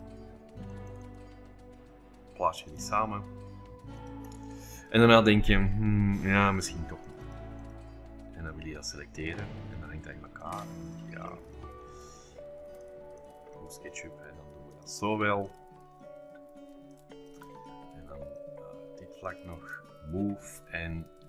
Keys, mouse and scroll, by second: 0.7-1.7 drag, 2.6 m, 2.8 click, 4.1-5.4 drag, 4.3 space, 7.0-8.2 drag, 9.7-10.5 scroll up 2, 10.4-11.8 drag, 11.6 shift+scroll up 2, 11.8 shift+click, 11.8-12.9 shift+middle drag, 12.3-12.9 scroll up 2, 12.7 shift+click, 13.6 middle click, 13.6-14.7 scroll up 2, 14.7 shift+click, 15.5 shift+click, 16.6-19.1 scroll up 4, 17.0 shift+click, 19.3 shift+click, 20.4 m, 20.5 click.